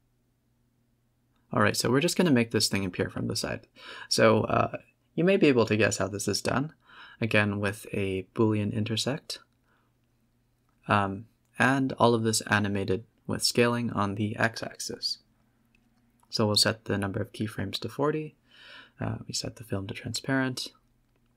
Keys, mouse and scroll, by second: 0.2 KP_0, 0.8-1.3 scroll up 3, 1.3 a, 1.4 a, 1.7 click, 2.1 g, 2.9 click, 3.3 click, 4.7 click, 5.4 click, 8.9 Tab, 9.0 scroll down 3, 9.3 Tab, 9.5 scroll up 2, 9.7 a, 9.8 a, 10.4 click, 10.9 click, 11.1 click, 11.5 g, 12.2 a, 12.3 a, 12.6 click, 13.1 s, 15.1-17.4 drag, 17.5 click, 18.1 click, 19.1 z, 19.6 a, 19.7 a, 20.5 click.